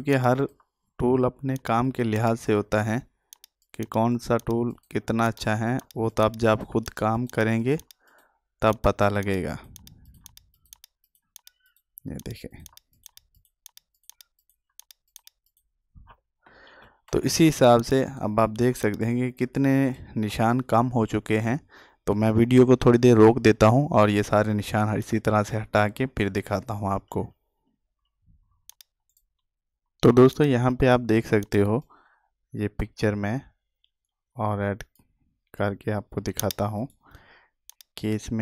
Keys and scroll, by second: 16.5 ctrl+z.